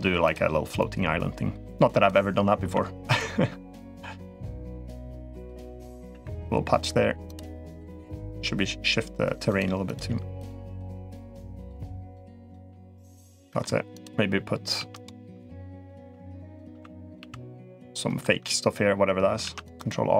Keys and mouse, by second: 0.0 click, 0.7-1.8 drag, 2.3 1, 2.8 click, 3.1 g, 4.1 click, 4.3 g, 5.4 middle click, 6.0 3, 6.1 click, 7.0 click, 8.1 g, 9.6 click, 9.8 g, 10.4 click, 10.6 g, 11.4 click, 11.6 g, 12.2 click, 12.4 g, 13.1 middle click, 13.7 click, 14.5-16.9 typing, 19.2 ctrl+r, 20.0 s.